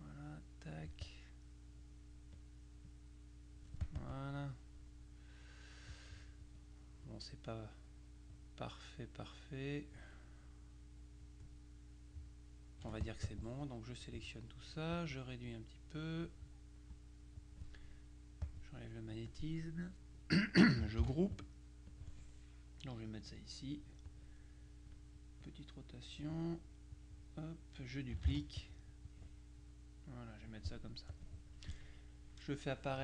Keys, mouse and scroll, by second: 2.5 click, 3.9 click, 12.9 F1, 13.1 click, 15.1-16.8 drag, 17.0-18.1 drag, 18.5 click, 21.1 ctrl+g, 22.0-23.9 drag, 24.1 click, 25.5-26.6 drag, 27.0 click, 28.4 ctrl+d, 29.2-31.1 drag, 31.2 click.